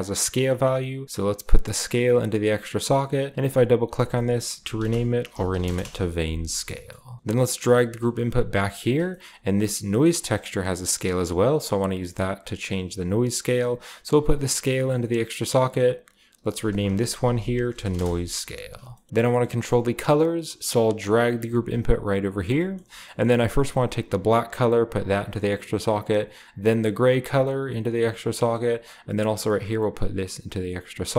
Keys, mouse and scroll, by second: 1.3-2.4 drag, 3.3 click, 3.4 typing, 3.5 click, 4.7-8.2 typing, 6.6-7.8 scroll down 1, 6.7 middle click, 7.3-8.2 middle drag, 8.8-12.9 middle drag, 9.2-10.4 scroll up 1, 13.0-15.7 middle drag, 15.7 click, 15.9 click, 16.5-18.9 drag, 17.2-19.6 typing, 19.1 scroll down 1, 19.2 middle click, 20.3 scroll down 1, 20.7 right click, 21.0-22.3 scroll down 2, 21.1 middle click, 21.3 typing, 22.3-24.5 middle drag, 22.3-22.7 scroll down 1, 22.7-24.1 scroll up 1, 23.1-28.2 drag, 24.1-24.5 scroll up 1, 28.4-29.6 drag, 30.7 drag.